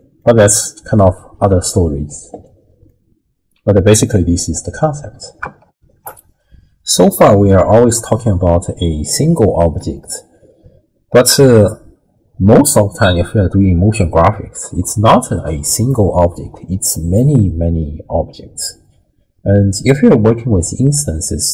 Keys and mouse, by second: 0.2 click, 0.3 middle click, 2.9-3.9 drag, 4.1 ctrl+click, 5.7 ctrl+alt+shift+w, 6.0 ctrl+alt+shift+q.